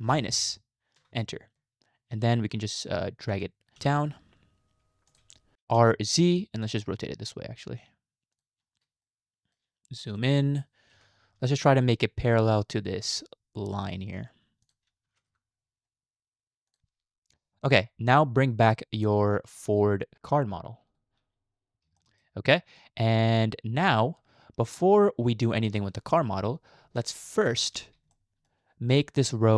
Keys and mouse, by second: 3.3 g, 8.1 r, 9.2 shift+middle click, 10.9 r, 15.1 g, 22.1 shift+middle click, 27.0 shift+middle click, 28.2 shift+middle click.